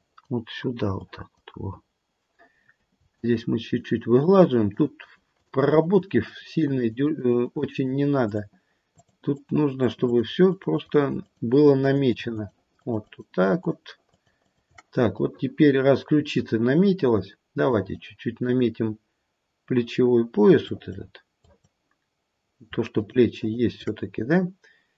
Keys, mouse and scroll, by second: 0.9 click, 3.1 shift+click, 3.5 shift+click, 4.7 shift+click, 5.0 shift+click, 5.3 shift+click, 5.6 shift+click, 5.9 shift+click, 6.2 shift+click, 6.6 shift+click, 6.8 shift+click, 7.0 shift+click, 7.3 shift+click, 7.5 shift+click, 7.8 shift+click, 8.2 shift+click, 8.8 shift+click, 9.3 shift+click, 9.8 shift+click, 10.0 shift+click, 10.4 shift+click, 10.7 shift+click, 11.0 shift+click, 11.2 shift+click, 11.4 shift+click, 11.8 shift+click, 12.1 shift+click, 12.3 shift+click, 12.7 shift+click, 13.0 shift+click, 13.5 shift+click, 14.0 shift+click, 14.3 shift+click, 15.3 middle click, 17.7 click, 18.4 click, 21.4 click, 23.0 shift+click, 23.4 shift+click.